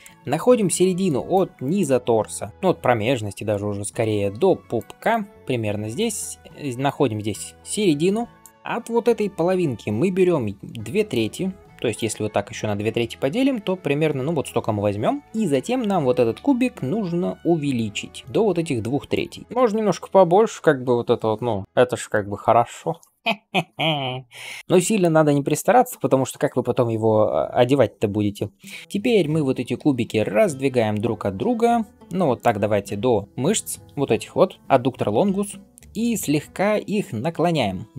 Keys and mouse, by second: 0.9-6.7 d, 1.2-6.2 drag, 8.3 d, 8.4 d, 8.5-10.7 drag, 8.5-10.7 middle drag, 8.5-10.7 right drag, 10.7-13.0 d, 15.4 s, 19.1-21.3 right drag, 19.4 g, 21.6-23.1 right drag, 24.6-27.5 right drag, 28.8-30.5 middle drag, 28.8 r, 29.0 g, 36.8 r.